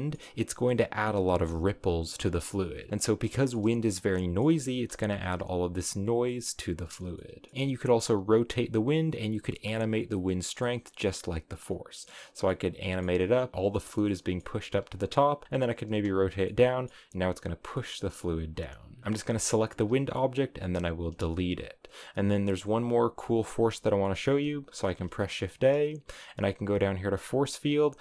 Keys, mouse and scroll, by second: 1.2 space, 2.0-2.4 scroll down 2, 2.9 scroll up 5, 3.2-4.6 shift+middle drag, 4.6 space, 6.6-7.0 scroll down 3, 7.0 middle click, 7.5 r, 9.0 click, 9.8 space, 10.5-14.5 middle drag, 14.5 r, 15.4 g, 15.8 space, 16.6-18.7 middle drag, 18.7 scroll up 2, 19.0 middle click, 19.2 x, 23.9 scroll up 1, 23.9 middle click, 24.6 shift+a.